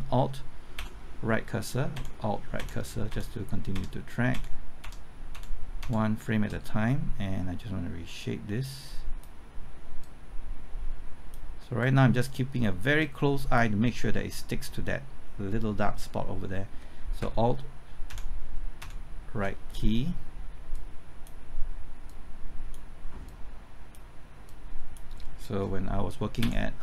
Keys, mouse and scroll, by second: 0.7 alt+Right, 1.9 alt+Right, 2.5-4.8 typing, 8.1-14.3 drag, 17.1 typing, 18.0 alt+Right, 18.7 alt+Right, 20.7-24.3 drag, 26.4 alt+Right.